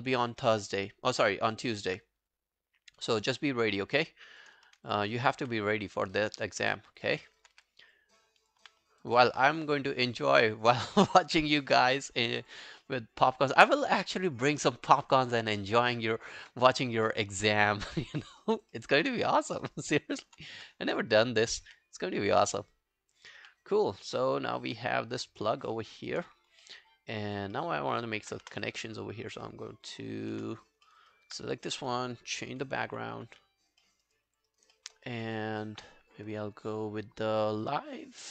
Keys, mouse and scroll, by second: 0.2 alt+middle click, 0.4 alt+right click, 0.7 alt+click, 1.5 alt+middle click, 1.7 alt+right click, 3.4 r, 5.4 r, 6.6 w, 7.1 alt+middle click, 7.3 alt+right click, 7.6 w, 8.6 q, 8.8-9.5 scroll down 3, 9.1 alt+click, 10.0 alt+scroll down 1, 10.1 alt+click, 10.5 alt+middle click, 11.2 alt+right click, 11.4 alt+click, 11.8 alt+scroll down 2, 12.0 alt+middle click, 12.3 alt+scroll up 3, 12.5 alt+click, 12.9 alt+middle click, 13.1-13.9 alt+scroll down 1, 17.1 alt+middle click, 17.4 alt+scroll down 1, 17.6 alt+click, 18.0 alt+middle click, 18.2 alt+scroll up 2, 18.4 alt+click, 18.8 alt+middle click, 19.1 alt+right click, 19.3 alt+click, 19.7 alt+right click, 19.9 alt+middle click, 20.2 alt+right click, 20.6 r, 21.7 w, 23.4 q, 23.6 scroll down 3, 24.1 alt+click, 24.6 alt+middle click, 24.9 alt+scroll down 1, 25.1 alt+click, 25.5 alt+middle click, 25.8 alt+scroll up 2, 26.0 alt+middle click, 26.7 alt+middle click, 27.0 alt+scroll down 1, 27.2 alt+click, 27.6 alt+middle click, 28.0 alt+scroll down 1, 28.1 alt+click, 28.5 space, 30.4 space, 30.9 alt+middle click, 31.1 alt+right click, 32.8 alt+b, 33.8 alt+middle click, 34.1 alt+right click, 34.3 alt+click, 34.5 alt+right click, 34.8 alt+middle click, 35.0 alt+right click.